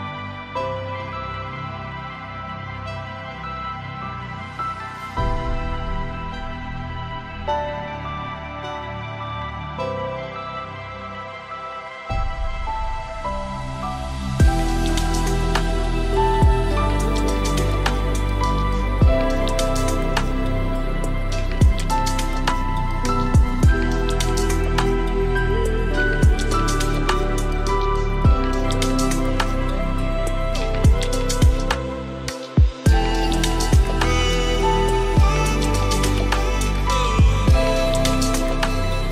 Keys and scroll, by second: 6.4 ctrl+z, 10.2 ctrl+space, 34.2 ctrl+space.